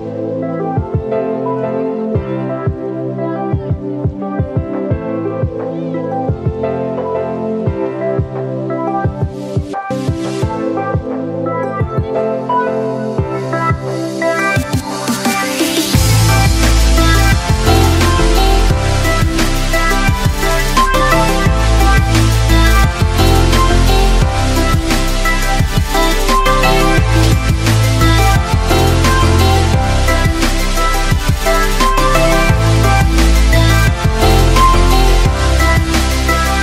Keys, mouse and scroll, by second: 1.3-13.6 drag, 13.6-15.8 right drag, 16.0-17.0 typing, 17.3 Return, 18.4-19.9 typing, 21.1-22.1 typing, 22.7 Return, 23.4 shift+\, 23.7 Up, 24.8 Tab, 27.2-36.6 right drag.